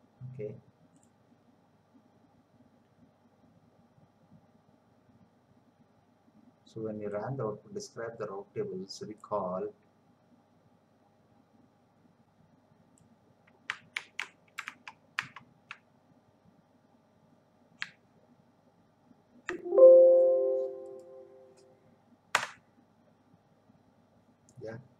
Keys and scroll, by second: 13.9 ctrl+c, 14.8 alt+Tab, 17.8 BackSpace.